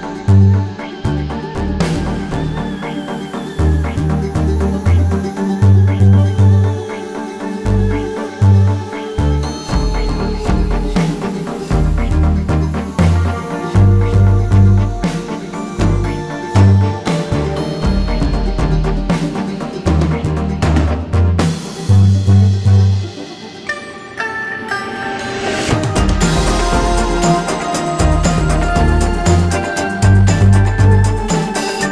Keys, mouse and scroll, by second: 0.8 click, 7.2 alt+scroll down 1, 7.5 alt+scroll up 1, 8.1 click, 9.5-10.1 alt+scroll up 1, 10.4 space, 10.5 click, 15.4 click, 16.5 alt+scroll down 1, 16.7 alt+scroll up 1, 17.8 space, 22.0 click, 22.8 ctrl+click, 23.4 click, 24.2 alt+scroll down 1, 24.5 alt+scroll up 1, 25.5-25.9 alt+scroll down 1, 25.9 alt+scroll up 1, 26.5 alt+scroll down 1, 27.1-27.6 alt+scroll up 1, 28.2 click.